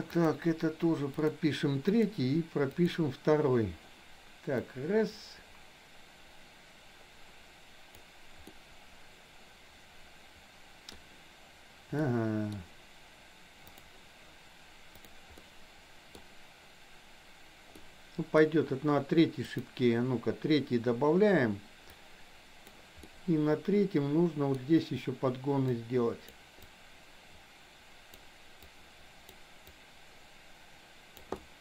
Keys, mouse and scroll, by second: 0.2 click, 4.7-8.1 drag, 8.6-10.9 middle drag, 12.1 middle click, 15.4 middle click, 17.7 middle click, 19.6 click, 21.9 click, 23.2-24.6 middle drag, 25.8 click, 26.7-28.3 drag, 28.7 click, 29.7-31.3 drag, 31.4-31.6 middle drag.